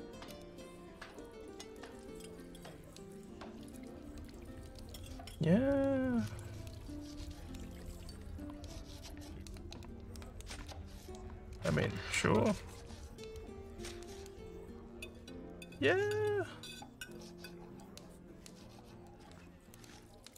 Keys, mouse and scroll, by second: 1.1 right click, 2.1 click, 3.6 right click, 4.9 click, 6.3 right click, 7.3 click, 9.0 right click, 10.1 click, 12.0 alt+middle click, 12.4-20.3 alt+drag.